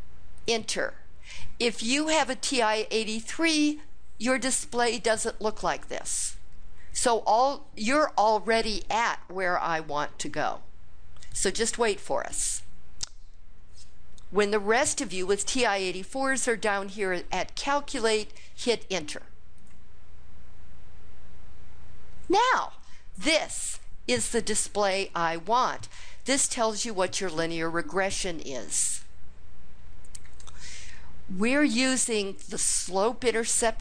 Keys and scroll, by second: 0.3 Return, 19.4 Return.